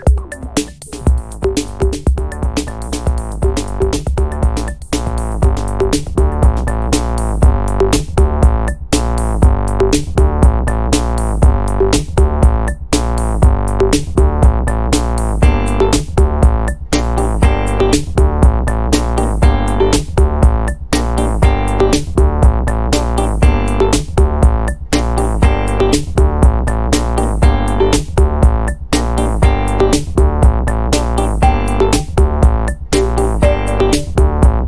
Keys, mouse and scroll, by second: 4.6 0, 6.5 click, 8.9 click, 11.1 click, 12.1-13.4 typing, 14.9 BackSpace, 16.2 click, 17.3-18.2 typing, 19.0 click, 19.9-20.8 typing, 21.4 click, 22.7 click, 23.8 click, 24.5-27.9 drag, 29.5 click, 30.9 ctrl+click, 34.5 click.